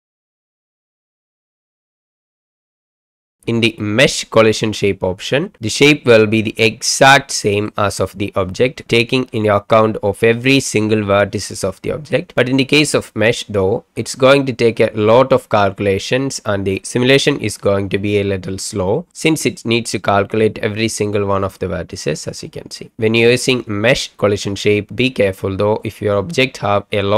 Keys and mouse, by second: 2.9 middle drag, 3.1 click, 6.5-7.8 middle drag, 9.4 click, 11.2-12.1 middle drag, 21.0-22.0 middle drag.